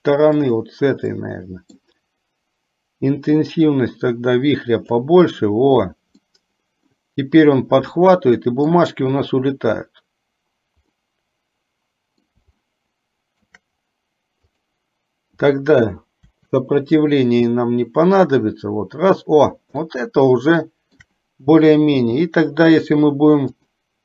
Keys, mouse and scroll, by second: 1.4 middle click, 3.5-5.1 drag, 6.4 middle click, 12.8-13.8 shift+middle drag, 14.8 click, 16.6 Delete, 20.1-21.3 shift+middle drag, 22.3 g, 23.8 click.